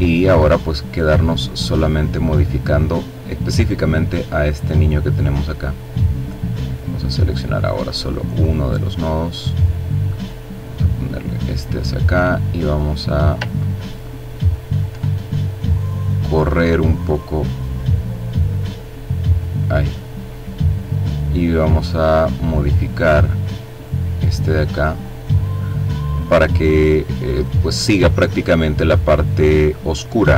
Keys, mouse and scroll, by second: 1.8-3.0 drag, 3.8-5.5 drag, 6.3 click, 6.9-9.2 drag, 9.3-11.0 drag, 11.3-12.5 drag, 12.5-13.5 ctrl+scroll up 3, 13.5-14.0 ctrl+scroll down 1, 14.8-16.3 drag, 16.5-19.8 drag, 19.8-20.2 scroll down 1, 20.8 click, 21.7-23.3 drag, 23.5-25.1 drag, 25.9-26.9 drag, 28.1 click, 29.3-30.3 drag.